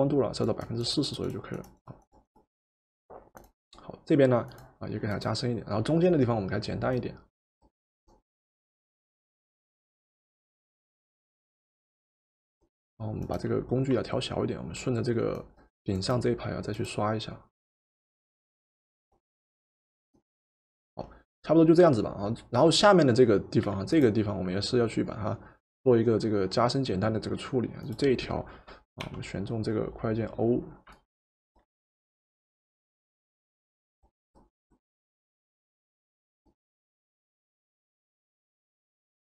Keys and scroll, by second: 23.7 v, 29.1 o.